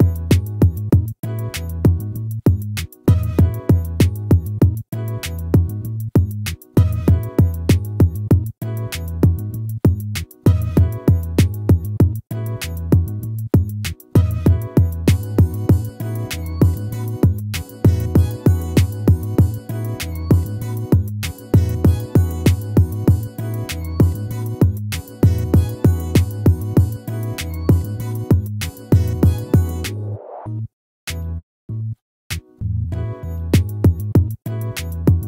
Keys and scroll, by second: 4.8 ctrl+-, 14.6 ctrl+z, 19.4 ctrl+-, 22.6 ctrl++, 35.1 ctrl+-.